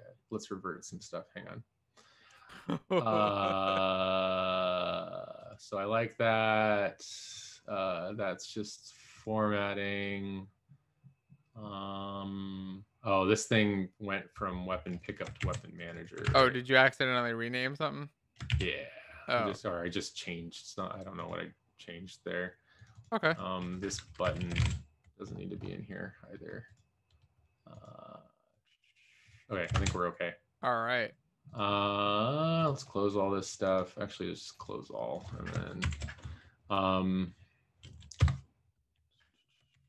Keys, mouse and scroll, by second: 15.8 ctrl+c, 16.5 ctrl+v, 19.1 ctrl+s, 24.3 shift+Delete, 24.6 ctrl+Down, 37.8 Down, 38.2 Return.